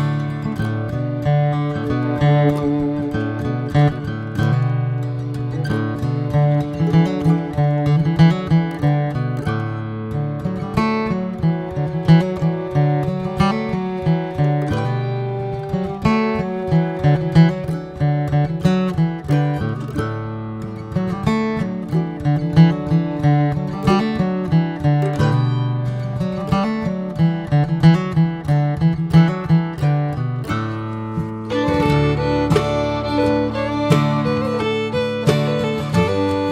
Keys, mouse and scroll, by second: 2.2 click, 13.7 scroll up 4, 14.0-19.8 drag, 20.2 middle click, 21.1 n, 21.5 click, 21.8-24.0 middle drag, 24.0-28.2 drag, 28.2-30.6 scroll down 3, 30.6-31.4 scroll down 2, 31.4 click, 34.9-35.5 drag, 35.7-36.5 middle drag.